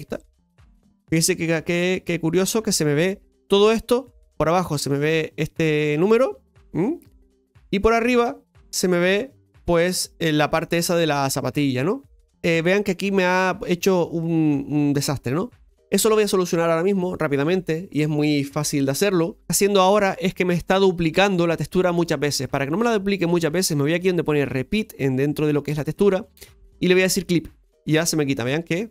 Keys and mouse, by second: 1.2-4.2 middle drag, 5.2-9.2 middle drag, 9.9-10.6 middle drag, 12.0-12.3 middle drag, 19.6-22.8 drag, 23.6-25.8 middle drag, 25.8-28.9 drag.